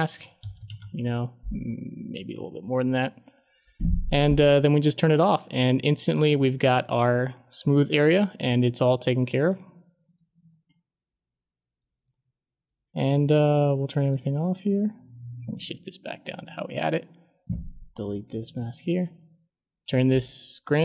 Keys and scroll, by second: 0.1-1.0 typing, 18.4 Delete.